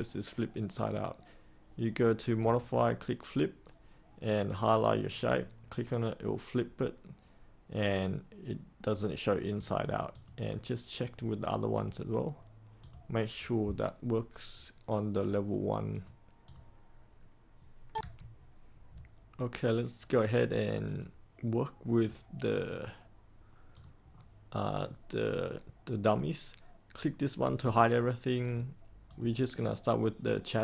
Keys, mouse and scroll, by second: 2.4-11.2 drag, 17.9 3, 20.8 click, 24.1-25.7 scroll down 1, 28.4 click.